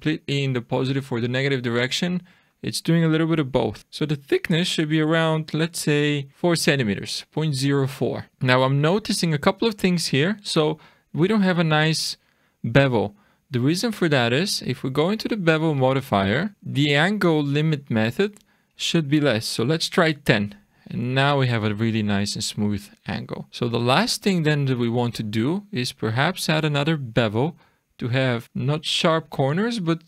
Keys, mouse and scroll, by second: 2.4 click, 3.8 click, 7.7-8.2 scroll up 4, 8.2 shift+middle click, 8.2 scroll down 3, 8.8 middle click, 9.6-10.0 scroll down 1, 15.8 click, 18.3 click, 21.4-22.3 scroll down 7, 22.8 shift+middle click, 23.5-24.5 scroll up 2, 24.5 click, 26.3 click, 27.6 click, 28.3-28.8 scroll up 5, 28.4 middle click.